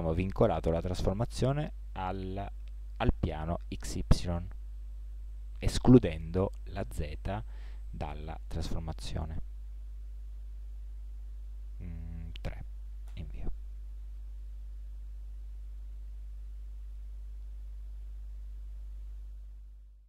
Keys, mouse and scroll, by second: 14.0-15.9 middle drag, 16.0 middle drag, 16.2 middle drag.